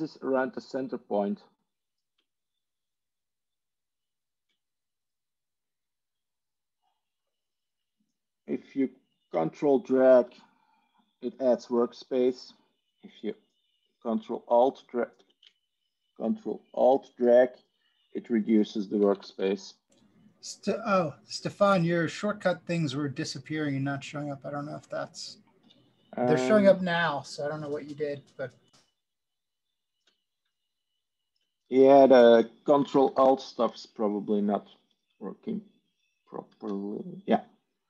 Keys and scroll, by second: 19.9 Tab, 25.5 Tab, 36.4 ctrl+a.